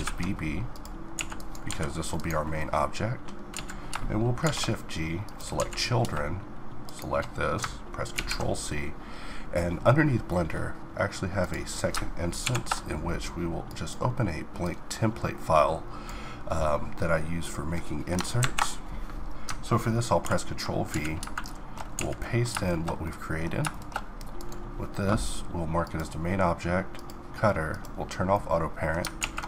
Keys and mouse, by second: 0.7 a, 1.3 g, 2.2 click, 3.1 z, 4.0 shift+g, 5.2 z, 7.7 ctrl+c.